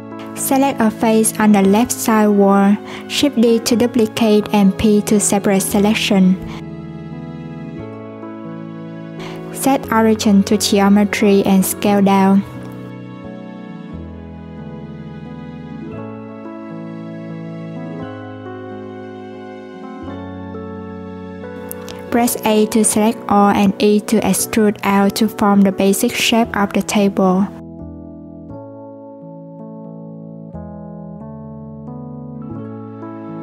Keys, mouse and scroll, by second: 0.0 shift+right click, 0.2 x, 0.8 click, 2.5 Tab, 3.2 click, 3.9 3, 4.6 click, 6.7 p, 7.9 Tab, 8.7 click, 9.7 right click, 11.8 s, 15.2 click, 16.2 click, 18.4 click, 20.4 Tab, 21.2 a, 28.9 Tab, 29.9 click, 32.5 right click.